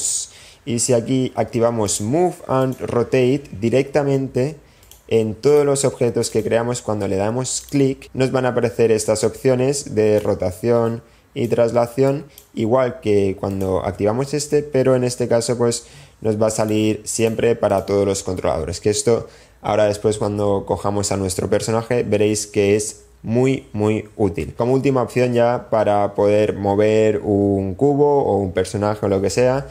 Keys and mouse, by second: 4.1 click, 6.4 click, 9.0 click, 10.3 click, 11.8 click, 12.8 click, 15.1 click, 16.3-17.3 drag, 19.1-19.7 drag, 20.0 click, 24.2 n.